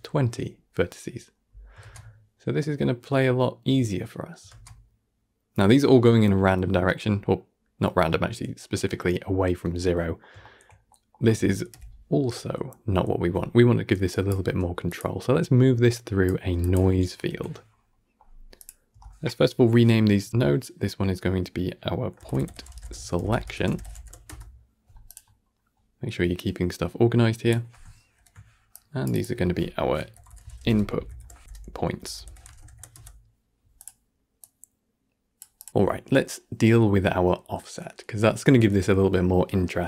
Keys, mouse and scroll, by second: 0.7-1.1 scroll down 1, 1.7 shift+space, 7.1-8.1 middle drag, 8.1-9.7 scroll up 3, 9.7-11.6 middle drag, 11.6 shift+Left, 14.0 drag, 15.2 scroll down 1, 15.4 middle click, 15.8-17.4 drag, 17.4-17.8 scroll up 6, 17.8 middle click, 18.5-25.2 drag, 25.2-25.6 scroll down 1, 25.6-26.2 middle drag, 26.2-29.2 drag, 29.2 F2, 33.7-35.7 drag, 35.7-36.2 scroll up 2.